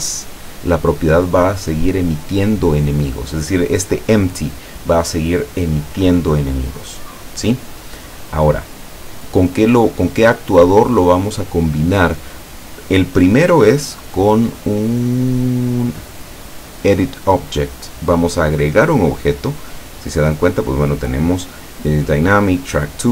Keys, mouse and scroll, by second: 8.1-9.1 middle drag, 10.1 click, 16.8 click, 20.5 click.